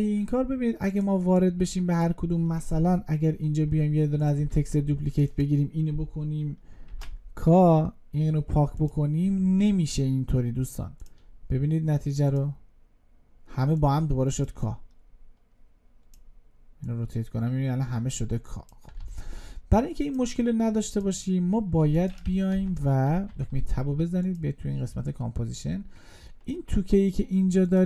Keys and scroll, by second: 4.5 ctrl+d, 19.0 ctrl+z.